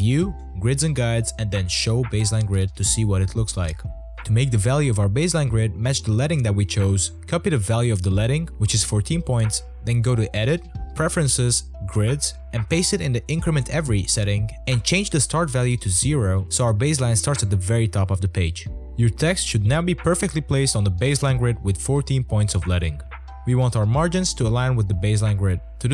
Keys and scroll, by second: 19.2 o.